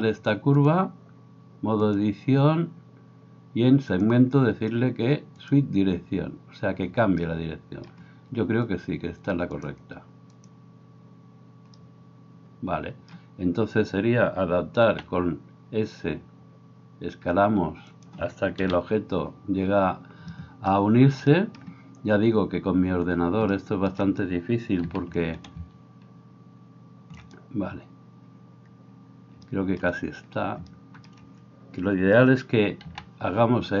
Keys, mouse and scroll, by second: 15.9 s, 19.1-33.8 middle drag, 19.1 KP_7, 25.7 s.